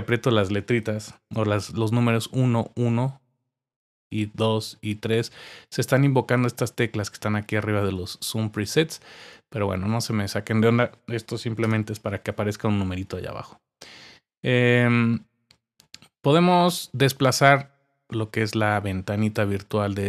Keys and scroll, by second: 2.0-2.5 typing, 3.9-5.3 typing.